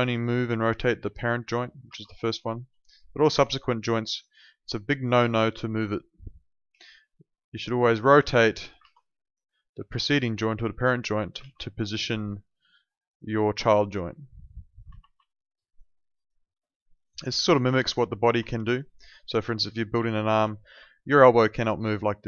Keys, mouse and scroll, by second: 0.3 w, 0.9 click, 1.8 ctrl+z, 2.4 alt+middle click, 3.1 click, 3.5 alt+click, 6.7 e, 7.8 click, 8.9 z, 9.2 click, 11.4 ctrl+z, 13.1 click, 14.9 ctrl+z, 15.2 alt+click, 15.9 alt+middle click, 16.1 alt+right click, 16.5 alt+middle click, 16.8 alt+right click, 17.0 alt+click, 18.5 alt+click, 18.8 alt+right click, 19.0 alt+click, 20.0 alt+click, 20.6 w, 21.3 click.